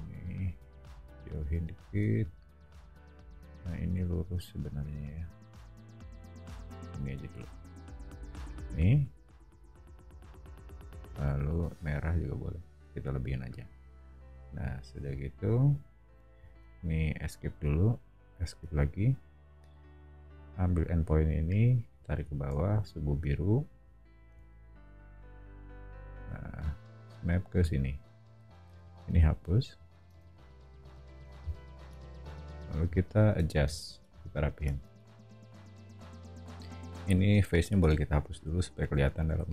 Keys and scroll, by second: 0.7 o, 15.8 shift+o, 22.2 o, 24.8 scroll, 28.6 e, 30.0 space, 30.7 o, 34.8 space, 37.8 BackSpace.